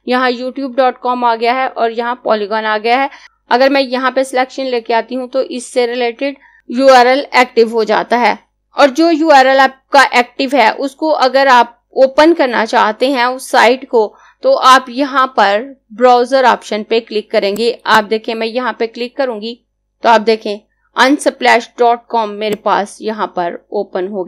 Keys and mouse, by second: 17.3 click, 22.2-24.2 drag.